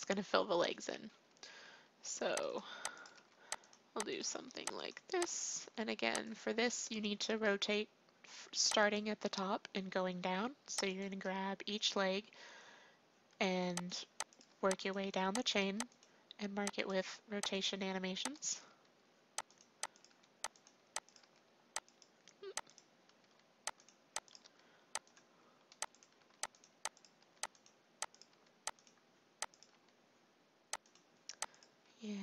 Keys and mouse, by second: 1.4 r, 3.1 r, 4.3 r, 5.6 r, 13.3 r, 14.4 r, 15.6 r, 16.9 r, 18.6 r, 20.0 r, 21.6 r, 23.2 r, 24.4 r, 26.2 r, 27.2 r, 28.3 r, 29.7 r, 31.8 r.